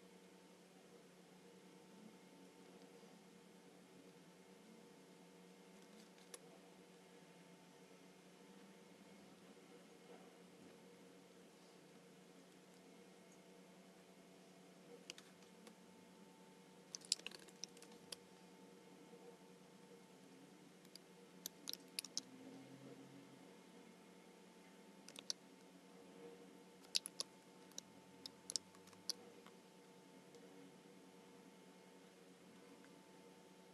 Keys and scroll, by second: 5.9 space, 15.2 space, 17.7 super+=, 17.9 space, 22.0 alt+super+b, 28.9 alt+super+b.